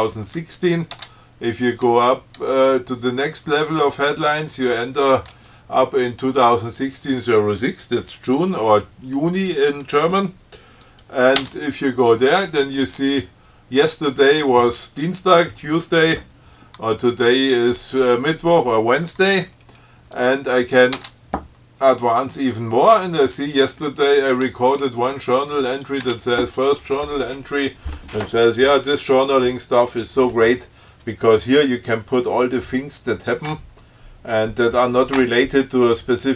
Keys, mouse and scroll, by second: 1.2 Tab, 11.1 click, 11.6 Tab, 20.4 click, 21.2 Tab, 26.0 click, 26.3 Tab.